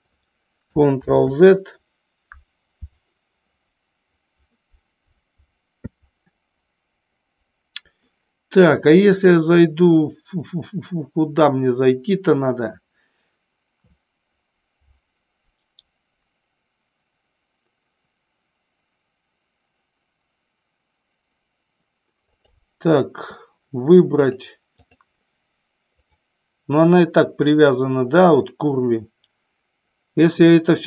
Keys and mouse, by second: 1.1 ctrl+z, 9.1-12.3 drag, 22.1 click, 24.2-24.8 drag.